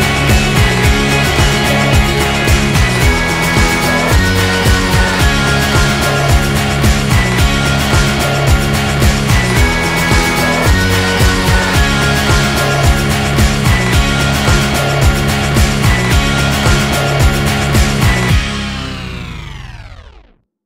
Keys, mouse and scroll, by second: 0.2-1.7 middle drag, 2.2-4.2 middle drag, 4.2 alt+h, 5.2-6.4 middle drag, 6.4 g, 9.6 middle click, 10.8 a, 14.2 middle click, 14.6-15.7 middle drag.